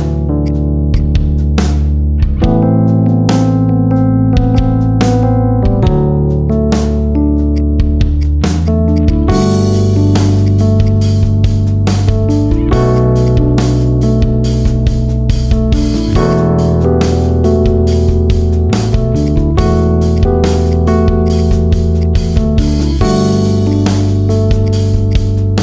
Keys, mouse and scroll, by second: 0.3 shift+click, 0.8 shift+click, 1.0-1.4 shift+middle drag, 1.4-1.8 scroll up 2, 1.8 scroll down 2, 2.0-3.2 middle drag, 3.2 shift+click, 3.5-4.4 middle drag, 4.4 shift+click, 5.4 f, 5.8 middle click, 6.0 scroll down 2, 6.6 scroll up 1, 6.8 middle click, 7.4 click, 8.1 click, 8.8 alt+shift+click, 9.0 alt+shift+click, 9.2 alt+shift+click, 10.0 o, 10.4-10.8 right drag, 11.6 p, 12.6 Tab, 12.8 click, 13.1 click, 13.4 scroll up 1, 13.6-14.0 middle drag, 14.0 scroll down 2, 15.1-16.2 middle drag, 16.2-17.8 drag, 19.2 click, 21.6 middle click, 21.9 click, 22.5-23.6 middle drag, 23.6 click, 24.6 click.